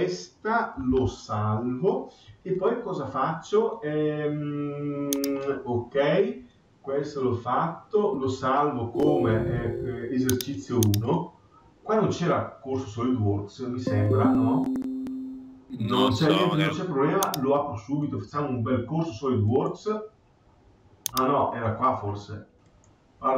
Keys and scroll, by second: 0.9 ctrl+s.